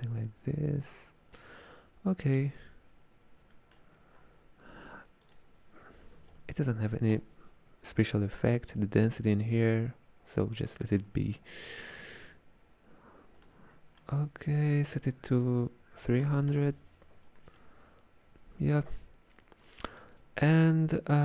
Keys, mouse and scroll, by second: 1.0-4.2 middle drag, 4.2 scroll down 5, 5.3-8.3 drag, 9.5-13.8 middle drag, 13.8-14.5 scroll up 2, 14.5-16.4 drag, 16.4 KP_0, 17.6-20.7 middle drag.